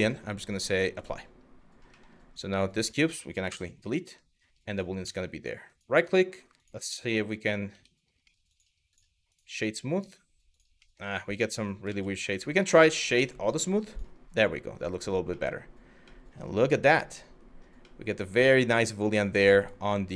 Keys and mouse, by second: 0.0-0.7 drag, 2.3 click, 3.1 Delete, 3.9 middle click, 4.4 click, 4.7 middle drag, 6.1-7.8 right drag, 7.8 middle click, 10.4 middle drag, 11.1 ctrl+z, 11.5 ctrl+z, 13.5 click, 14.0-14.7 middle drag, 14.9 middle drag, 15.8-17.0 middle drag, 17.5-20.1 middle drag.